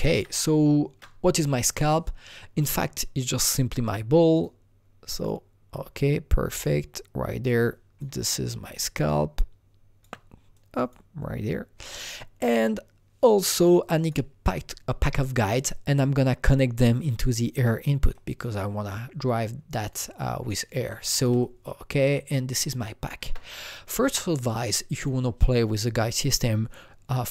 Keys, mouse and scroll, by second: 0.1 alt+Tab, 0.2 Escape, 4.3 alt+Tab, 4.3 Escape, 4.3 click, 5.1 click, 6.5 click, 8.2-13.5 shift+drag, 13.8-15.4 shift+drag, 15.4 scroll up 2, 17.1-18.1 scroll down 1, 18.1 click, 19.8 click, 19.8 click, 20.5 click, 20.5 click, 21.4-27.3 shift+drag.